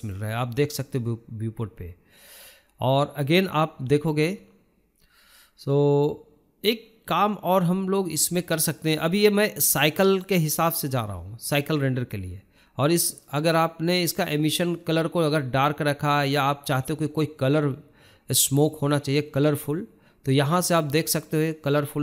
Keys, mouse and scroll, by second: 2.0-5.8 drag, 5.8-6.4 scroll down 1, 6.4-6.9 shift+middle drag, 6.9-7.5 scroll up 3, 7.5-9.6 shift+middle drag, 10.6-22.0 shift+middle drag.